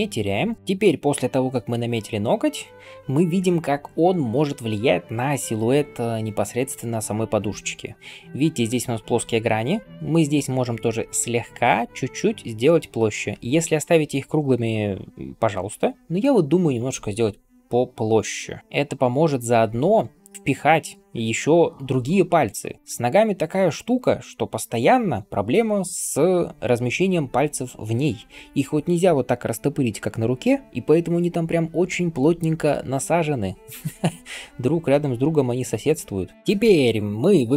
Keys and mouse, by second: 0.6 ], 9.1 ], 9.2 ], 9.3 ], 9.4 ], 17.4-32.6 ctrl+drag, 17.4-32.6 ctrl+middle drag, 17.4-32.6 ctrl+right drag.